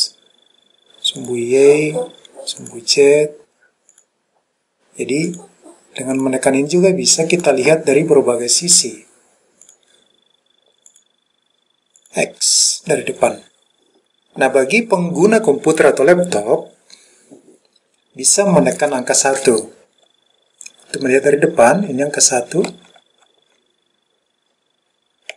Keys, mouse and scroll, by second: 1.3 click, 2.7 click, 4.0 click, 5.4 click, 6.3 click, 7.4 click, 8.6 click, 9.7 click, 11.0 click, 12.1 click, 21.9 KP_1, 22.8 KP_1, 23.3 KP_1.